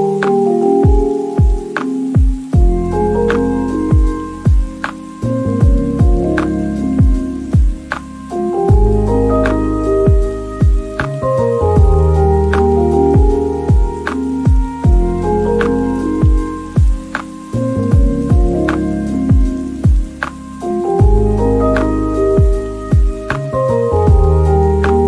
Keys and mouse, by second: 0.0-0.2 typing, 0.0 Return, 0.8 click, 1.4 middle click, 1.9-3.1 typing, 2.4 right click, 3.0 Return, 4.6-9.7 typing, 6.3 click, 6.6 shift+click, 7.5 click, 7.8 Tab, 7.8 click, 9.0 shift+middle click, 10.4 ctrl+j, 10.4 Tab, 11.3 shift+middle click, 11.5 Tab, 11.5-14.4 typing, 12.4 click, 12.7 click, 12.8 shift+middle click, 14.6 click, 15.0 click, 15.4 Tab, 15.5 Tab, 15.5 ctrl+a, 15.6 Tab, 15.8 3, 15.9 middle click, 16.2 ctrl+b, 16.9 right click, 17.1 middle click, 17.3 ctrl+shift+b, 17.8 shift+click, 18.0 Tab, 18.0 shift+middle click, 18.2 click, 18.2 shift+middle click, 18.4 middle click, 18.5 KP_Decimal, 18.7 g, 18.7 z, 18.9 drag, 19.1 KP_Decimal, 19.2 alt+g, 19.3 middle click, 19.7 shift+middle click, 19.9 click, 21.1 middle click, 21.2 shift+Tab, 21.3 3, 21.5 middle click, 21.8 x, 22.1 shift+click, 22.3 x, 22.3 middle click, 22.9 middle click, 24.2 middle click, 24.4 KP_1, 24.9 shift+click.